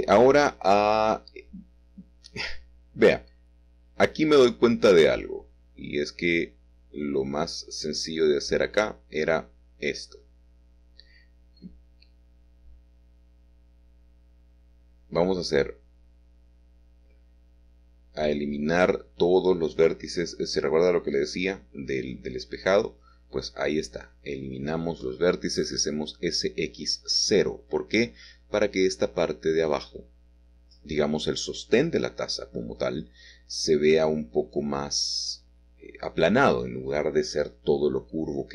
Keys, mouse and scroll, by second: 0.0 h, 3.5 3, 4.5-8.8 drag, 8.8-10.2 shift+middle drag, 10.2 x, 10.6 0, 11.6 Escape, 13.8 middle click, 18.3 click, 18.4 middle click, 20.9-23.5 middle drag, 24.4-25.8 shift+middle drag, 25.8 typing, 27.1 typing, 34.2 click, 34.7 click, 35.2 click, 35.7 click, 38.1 s, 38.4 y.